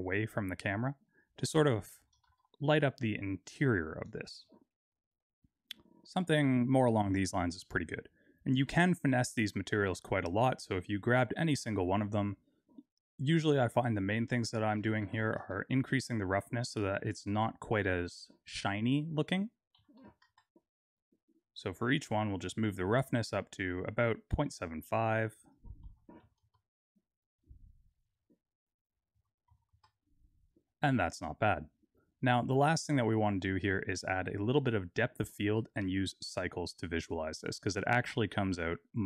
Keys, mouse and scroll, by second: 2.2 g, 4.7 KP_0, 9.6 click, 11.3 click, 12.3-14.3 scroll down 6, 14.3 click, 18.4 click, 19.5 click, 22.1 click, 24.5 click, 25.6 click, 28.0 click, 28.8 click.